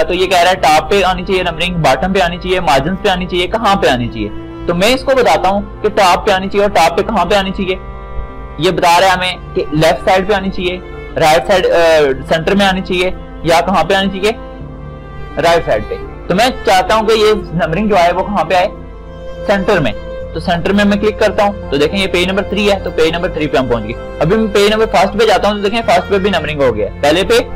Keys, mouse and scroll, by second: 20.8-27.5 shift+drag.